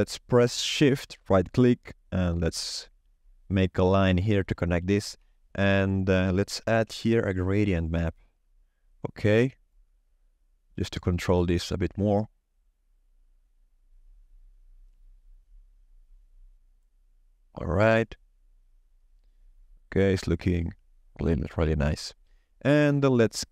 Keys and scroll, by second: 5.1 shift+a, 6.8 g, 7.7 r.